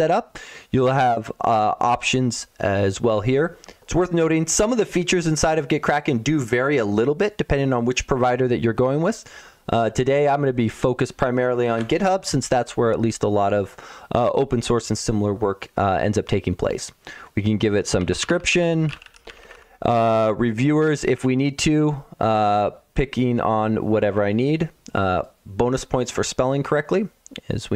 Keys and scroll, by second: 17.8-19.9 typing.